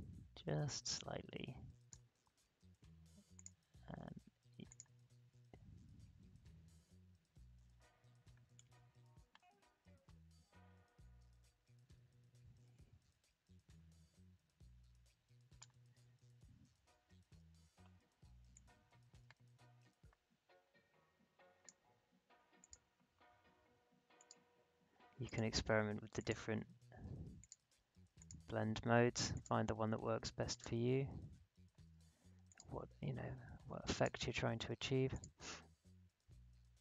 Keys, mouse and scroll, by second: 5.5 alt+scroll up 1, 6.6-7.3 alt+scroll down 1, 8.5-16.3 drag, 16.3 alt+scroll up 1, 17.8-18.1 alt+scroll down 1, 18.5-22.6 drag, 32.4 click.